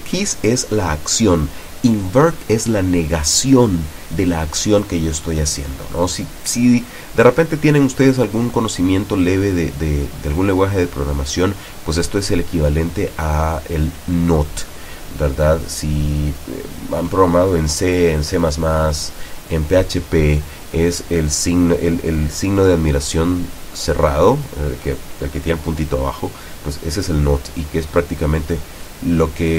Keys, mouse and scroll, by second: 21.2-22.4 drag, 23.0-24.1 drag.